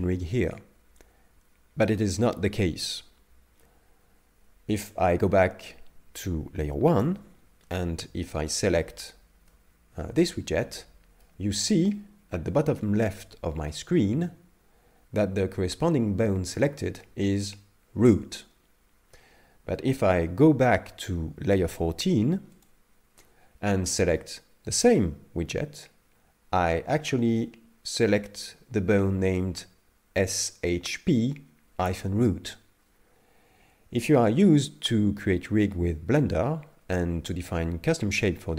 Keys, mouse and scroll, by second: 7.0 click, 8.4 right click, 9.5 middle click, 22.6 click, 24.7 right click.